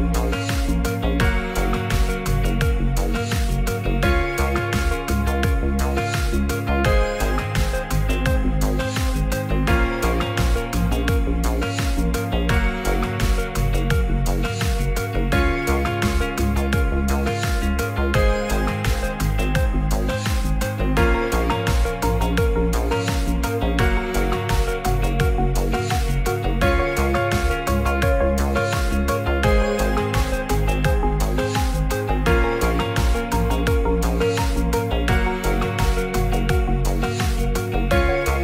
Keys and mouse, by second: 0.6 e, 1.3 click, 1.6 s, 3.3 click, 3.8 e, 6.0 click, 8.0 i, 10.2 click, 10.8 e, 12.4 click, 13.4 g, 13.5 z, 14.9 click, 29.3 click, 31.5 3, 31.8 click, 33.7 e, 35.5 click.